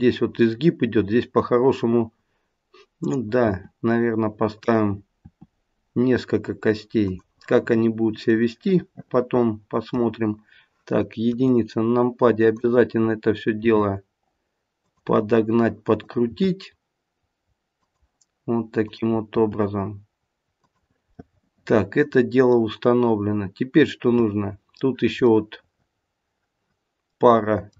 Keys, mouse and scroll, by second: 3.4 e, 5.2 e, 8.8 middle click, 11.3 KP_1, 12.5 click, 13.5 g, 15.9 click, 16.2 g, 18.7 click, 19.3 g, 21.1 middle click, 25.2 middle click.